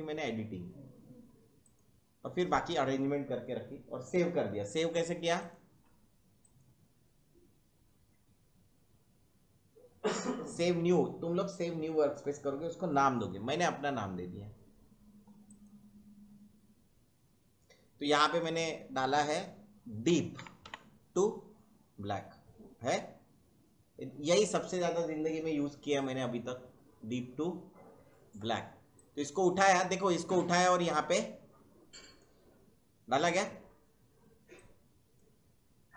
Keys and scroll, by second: 5.4 shift+2, 19.8-21.1 typing.